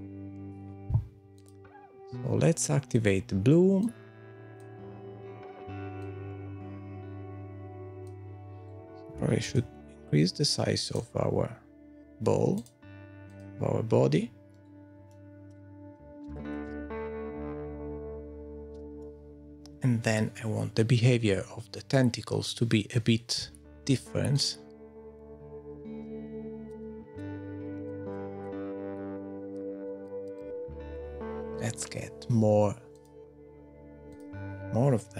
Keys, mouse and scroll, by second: 0.4 scroll up 3, 0.6 click, 0.8 click, 1.2 click, 1.4 click, 2.6 click, 4.0 click, 6.7 click, 6.8 click, 7.7 click, 8.4-11.2 scroll down 6, 8.7 middle click.